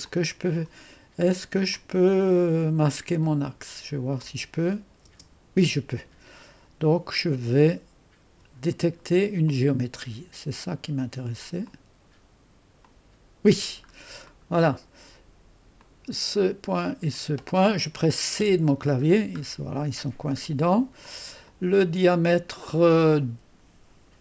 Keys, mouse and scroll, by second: 0.0 click, 1.7 click, 4.2 click, 5.0 space, 9.4 click, 11.6 click, 12.8 click, 13.2 click, 13.9-15.7 scroll up 2, 15.7 click, 17.1 click, 19.0-21.0 scroll down 1, 19.0 c, 21.0 click.